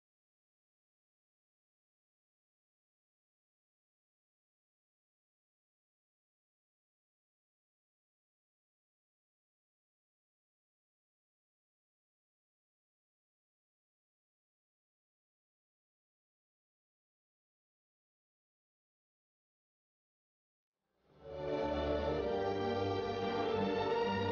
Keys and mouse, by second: 9.5-23.7 drag, 23.7-24.3 right drag, 24.2-24.3 drag.